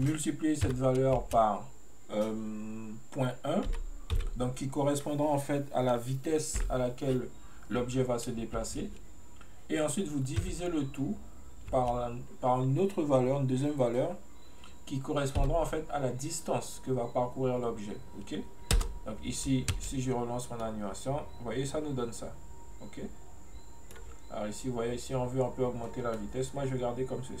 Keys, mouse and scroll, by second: 20.7-23.7 middle drag, 26.2-27.4 middle drag.